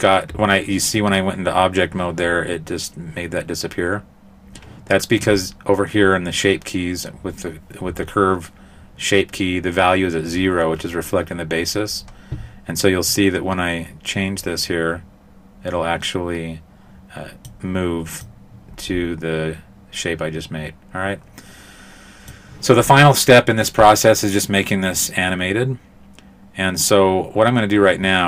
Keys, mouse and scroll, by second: 13.1 click, 15.4 click, 18.2 click, 27.8-28.2 scroll down 4.